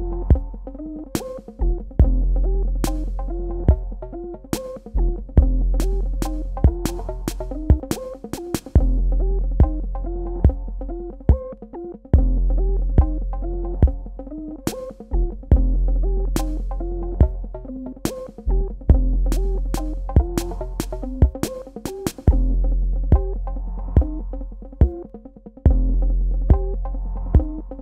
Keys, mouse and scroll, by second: 3.7 super+KP_Subtract, 6.3 click, 9.0 KP_Add, 11.2 super+KP_Subtract, 13.5 click, 16.3 click, 16.5 Tab, 18.6 click, 22.1 click, 25.2 Delete.